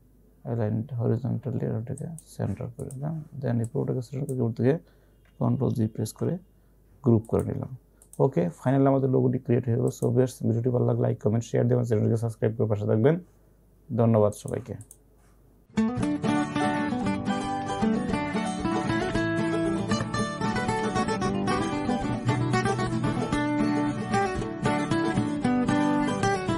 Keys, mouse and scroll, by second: 2.0-6.1 drag, 6.1 ctrl+g, 7.1-7.8 typing, 7.3 click, 9.1-9.9 typing, 14.4 click.